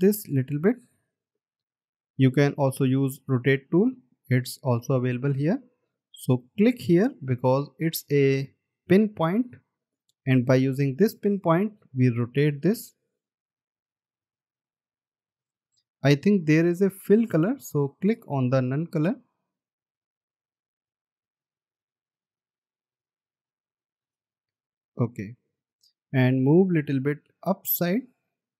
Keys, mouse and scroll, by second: 3.8 right click, 9.4 alt+scroll down 1, 10.4 alt+scroll up 1, 26.3-27.0 alt+scroll up 1.